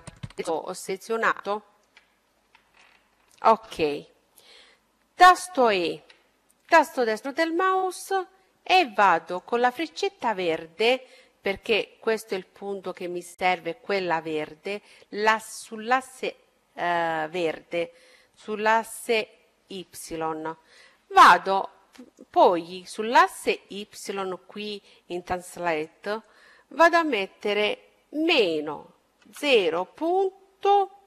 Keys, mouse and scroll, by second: 4.2 e, 6.5-8.4 drag, 8.4-10.5 middle drag, 9.7-11.3 drag, 20.4-22.4 drag.